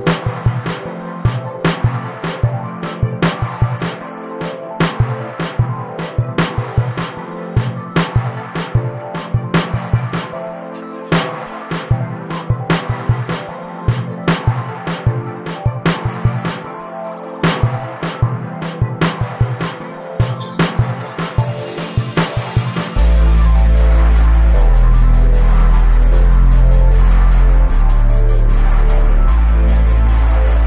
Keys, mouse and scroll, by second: 0.9-3.1 drag, 5.4 right click, 5.5 click, 6.7 shift+a, 7.2 s, 7.9 right click, 8.2 right click, 10.1-12.3 drag, 12.3 right click, 12.7 right click, 12.8 right click, 14.7 scroll down 5, 14.8 scroll up 1, 15.1-15.7 scroll down 1, 15.7 right click, 16.4 click, 17.8 click, 19.3 click, 19.8 h, 20.5 click, 23.3-25.4 drag, 25.4 right click, 26.2 scroll down 4, 26.4-26.9 scroll up 5, 27.2 scroll down 1, 28.2 right click, 28.8 right click, 29.0 right click, 29.2 right click.